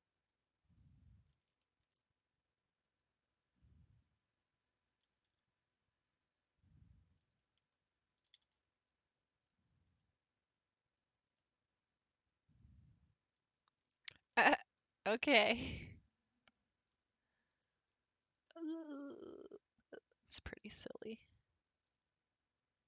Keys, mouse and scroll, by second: 1.3 scroll up 2, 1.6 shift+middle click, 2.2-3.1 scroll up 6, 3.9 click, 4.5-5.0 scroll down 3, 5.0 g, 7.7 scroll down 4, 8.3 g, 9.9 r, 11.4-14.6 middle drag, 14.6-16.9 scroll up 5, 16.9-22.6 middle drag.